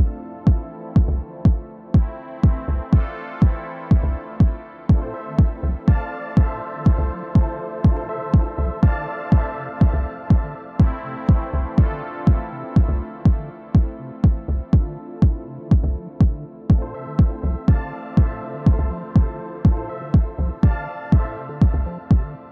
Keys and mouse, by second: 0.1 r, 0.3-0.8 drag, 1.0 F1, 1.9 click, 2.3 alt+x, 2.5 middle click, 2.8 r, 2.9 click, 3.3 click, 3.3 r, 3.8 w, 4.0 drag, 4.5 click, 4.9 alt+click, 5.1 r, 5.5 click, 6.0 alt+click, 6.3 alt+middle click, 6.5 1, 6.9 click, 7.2 click, 8.4 alt+click, 8.6 alt+x, 8.8 click, 9.4 alt+click, 9.6 click, 10.0 alt+click, 10.5 click, 11.1 r, 11.3 click, 11.5-13.0 drag, 13.2 4, 13.3 alt+click, 13.4 alt+x, 13.6 alt+middle click, 13.7 alt+click, 13.9 click, 14.0 alt+click, 15.1 click, 15.5 alt+click, 16.1 alt+click, 18.3-20.8 drag, 22.4 click.